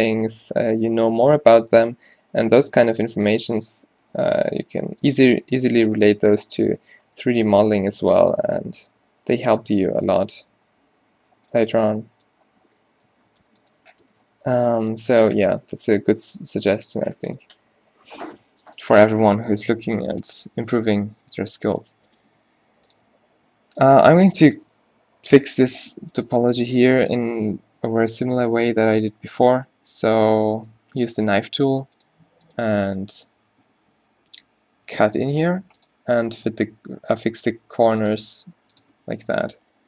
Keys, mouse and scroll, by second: 0.2 q, 0.4 middle click, 1.1 middle click, 2.1 g, 2.5 g, 4.3 g, 5.3 Tab, 8.0 Tab, 9.8-11.2 typing, 11.7 Tab, 15.3 space, 17.9 Tab, 18.4 z, 19.5 z, 20.6 k, 26.3 z, 28.5 a, 29.8 click, 29.8 g, 30.2 z, 31.3 k, 34.9 k, 37.5 k.